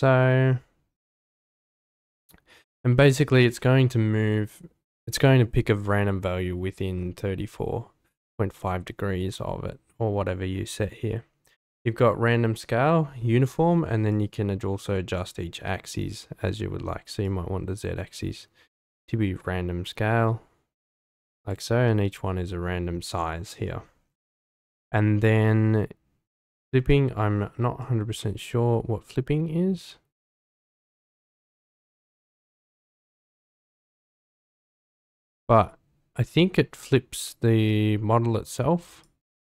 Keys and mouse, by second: 17.2-21.5 drag, 27.8-32.7 drag, 33.0-34.2 drag, 34.9-38.5 drag, 39.0-39.4 drag.